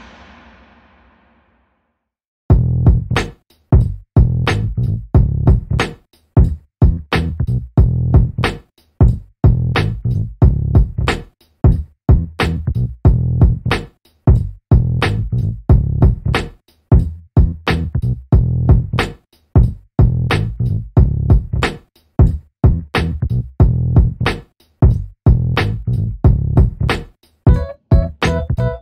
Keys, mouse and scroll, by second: 0.1-1.0 scroll down 1, 1.0 alt+middle click, 2.6-3.8 scroll down 1, 3.8 middle click, 4.5 alt+click, 7.4 double click, 8.9 click, 10.1 double click, 10.9 click, 11.2 double click, 11.6 right click, 12.1 click, 15.5 BackSpace, 16.0 click, 17.7 alt+middle click, 18.1 alt+click, 18.5 alt+middle click, 18.9 alt+click, 20.5-20.8 scroll up 1, 21.1 click, 21.8 BackSpace, 22.4 click, 23.1 BackSpace, 24.3 click, 25.2 scroll down 1, 26.0 alt+click.